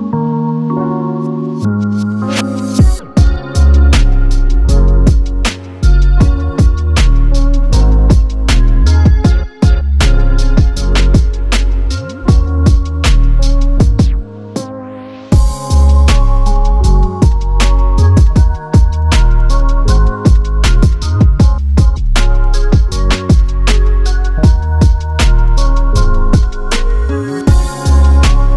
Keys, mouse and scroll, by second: 1.0 ctrl+shift+c, 2.0-4.3 typing, 4.8 Return, 5.7 click, 6.8 ctrl+shift+c, 9.1-11.2 typing, 14.5 click, 16.5 click, 21.8 ctrl+z, 22.6 click.